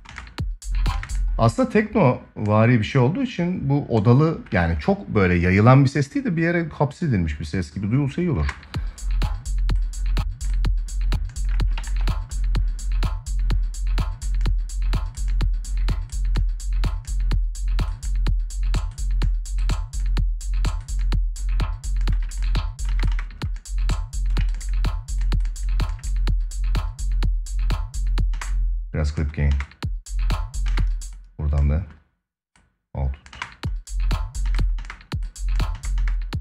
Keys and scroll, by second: 8.1 space, 11.5 ctrl+s, 22.6 space, 28.1 space, 33.0 space.